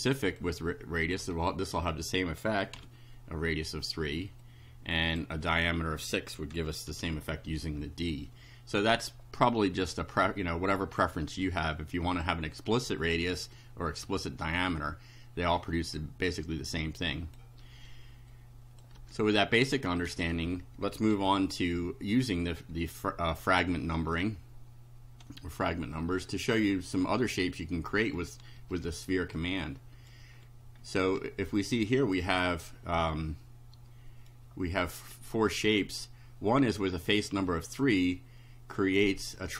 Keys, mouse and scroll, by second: 0.3 click, 1.4 Delete, 1.7 3, 2.8 F5, 4.4 click, 6.5 6, 6.9 F5, 10.0-11.2 drag, 12.1 click, 13.4 click, 15.7 click, 17.0 click, 18.3 click, 19.0 1, 19.6 click, 20.2 1, 21.2 F5, 22.6-23.7 drag, 28.2 shift+right click, 29.4 right click, 30.4-31.0 scroll up 3, 31.3-32.3 shift+right drag, 33.2-34.4 right drag, 36.7 click, 37.6 click.